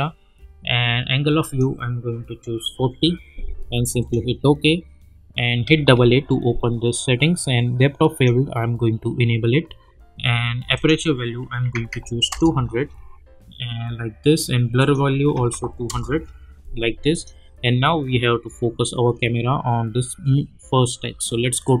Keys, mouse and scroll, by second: 4.0 click, 5.6 a, 5.9 a, 8.1 click, 10.7 click, 12.3 Return, 14.8 click, 15.8 Return, 17.1 click, 21.6-21.8 drag.